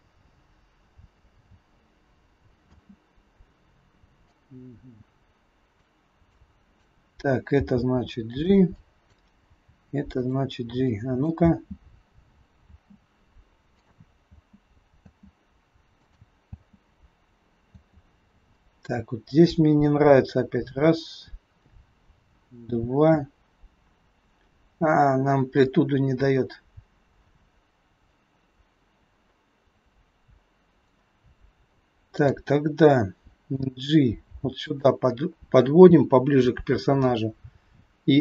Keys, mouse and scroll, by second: 2.6 space, 4.3 click, 6.1 click, 7.5 g, 8.7 click, 9.4 g, 10.7 click, 11.4 space, 12.6 space, 13.6 click, 14.3 space, 15.0 space, 16.0 click, 16.4 space, 17.7 space, 18.5 click, 32.1 click, 33.5 g, 38.1 a.